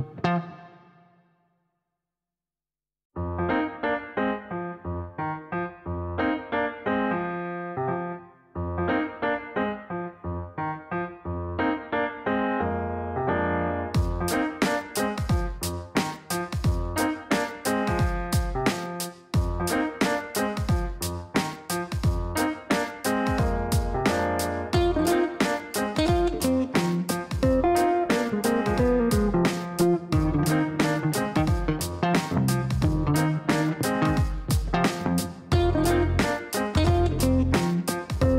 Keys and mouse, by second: 2.9 click, 5.2 click, 8.1 click, 9.1-11.0 typing, 11.7 click, 13.9 click, 14.1 click, 15.4 click, 17.2 click, 18.0-20.7 typing, 22.2 click, 22.4 click, 22.5 click, 23.8 KP_5, 29.3 click, 31.4 click, 31.6 click, 32.9 click, 37.9 click.